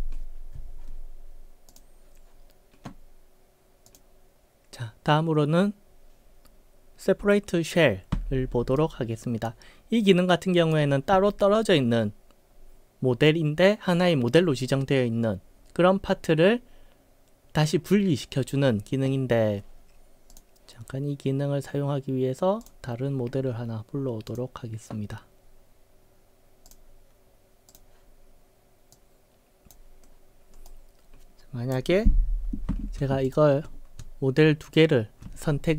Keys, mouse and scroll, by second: 1.7 click, 3.9 click, 8.8-9.5 right drag, 10.3-10.7 right drag, 20.3 click, 22.7 click, 24.3 click, 26.7 click, 27.7 click, 29.0-29.8 drag, 30.7-31.8 right drag, 33.3 shift+click, 34.7 shift+click.